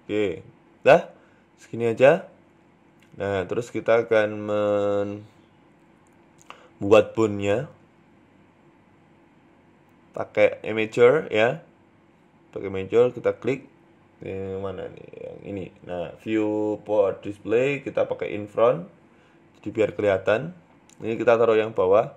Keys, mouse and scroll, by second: 0.2 scroll up 4, 0.5 shift+middle click, 0.7-1.7 scroll down 2, 0.9 middle click, 3.4 shift+middle click, 4.4 middle click, 5.6 KP_1, 7.1-7.7 scroll up 1, 8.5 shift+a, 13.9 click, 14.7 click, 15.2 click, 16.2 click, 16.8 click, 17.8 KP_3, 18.8 r, 20.8 g.